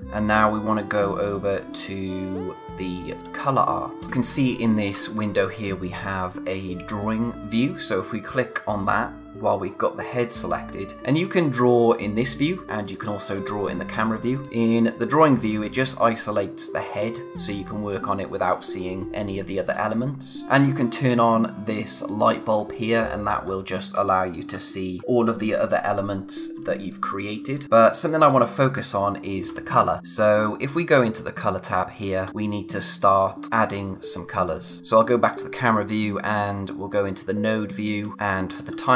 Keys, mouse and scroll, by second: 3.2 click, 10.3 click, 12.9 click, 20.4-21.7 scroll up 1, 22.6-23.4 scroll down 1, 26.6 space, 26.9 click, 27.6 click, 27.8 space, 31.1 click, 37.0 click, 37.8 scroll down 1, 38.1 space, 38.8-38.9 scroll up 1.